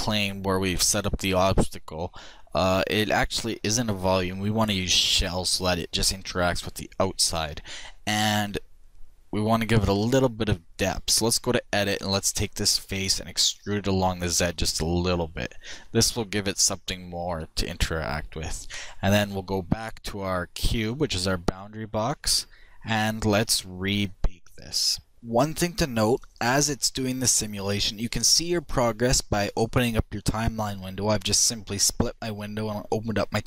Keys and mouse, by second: 2.3-4.1 drag, 8.3-10.1 drag, 11.6 e, 19.2-21.1 drag.